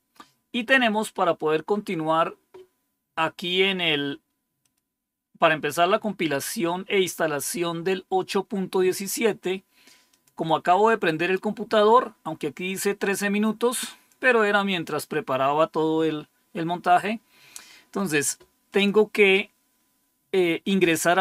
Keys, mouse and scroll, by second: 4.5 click, 10.0 click, 12.9-14.0 drag, 18.6 click.